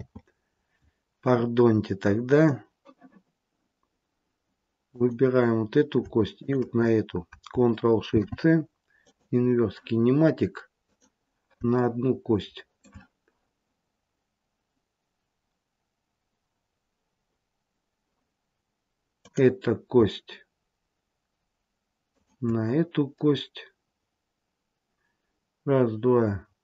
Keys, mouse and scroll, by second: 4.8 click, 6.3 shift+click, 8.0 ctrl+shift+c, 10.8 click, 11.7 shift+middle click, 19.1 click, 22.0 shift+click.